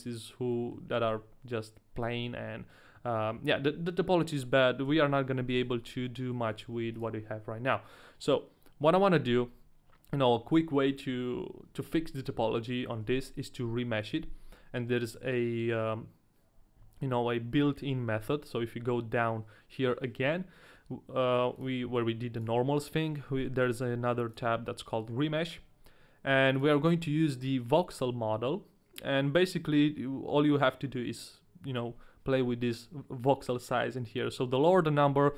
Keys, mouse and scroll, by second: 0.5 middle click, 2.2 middle click, 3.2-4.8 scroll down 1, 4.8 KP_1, 5.6 Tab, 6.1 middle click, 6.8 ctrl+a, 10.2 middle click, 10.9 Tab, 12.9 Tab, 18.5 click, 21.6 click, 22.4 click, 24.3 click, 26.5 click.